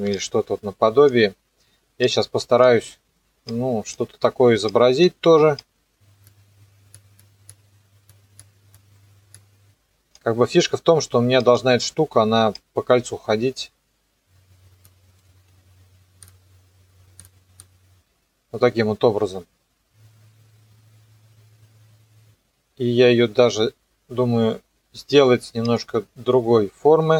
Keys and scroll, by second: 15.2 u.